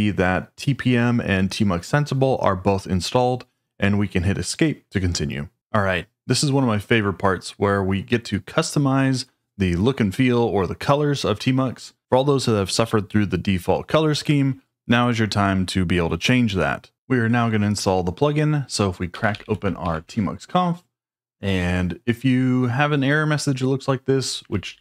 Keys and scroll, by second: 18.8-19.8 typing, 20.0 Return, 24.2-24.8 typing.